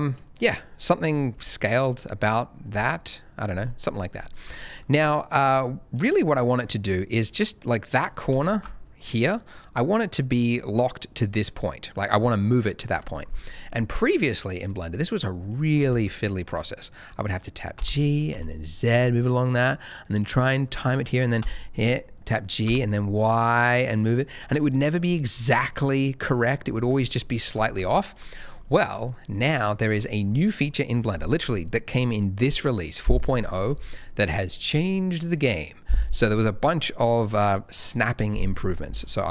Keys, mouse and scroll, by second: 0.2 scroll down 1, 0.3 middle click, 1.3 s, 1.7 click, 2.0 middle click, 2.6 s, 3.4 click, 3.6 middle click, 3.9 scroll down 1, 4.1 middle click, 4.3-5.6 scroll up 2, 4.6 shift+middle click, 5.6-6.6 scroll up 1, 6.6 middle click, 8.8 ctrl+shift+click, 10.5 click, 12.9 Escape, 13.4 middle click, 17.7 g, 18.3 z, 20.6 click, 21.3 g, 22.6 y, 24.1 click, 24.3-24.7 scroll up 1, 24.7 middle click, 25.0-26.2 scroll up 1, 26.2 middle click, 26.6-27.0 scroll down 1, 27.0 middle click, 27.1 scroll down 1, 27.5 ctrl+z, 27.7 ctrl+z, 28.2-28.6 scroll down 1, 30.2-32.2 scroll up 1.